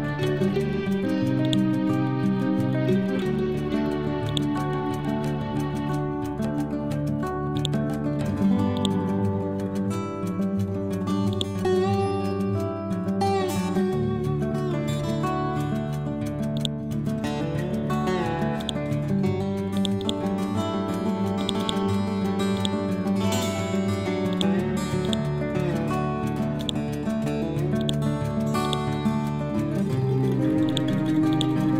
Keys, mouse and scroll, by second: 7.6 click, 8.8 right click, 9.4 Right, 11.4 click, 13.7-14.3 scroll up 1, 14.3-14.7 scroll down 1, 14.7 scroll up 1, 25.1 right click, 26.7 click, 27.1-27.9 scroll down 1, 27.9-31.4 drag.